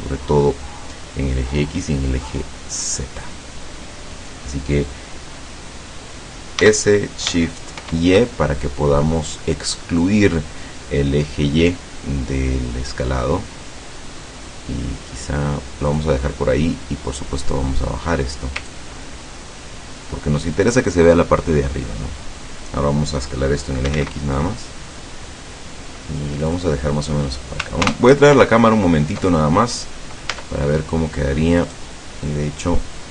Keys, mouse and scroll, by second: 6.7 s, 7.9 shift+y, 16.0 click, 18.8-20.7 ctrl+drag, 23.7-24.5 typing, 26.6 click, 27.9 ctrl+alt+KP_0, 30.4 Tab, 31.6 right click.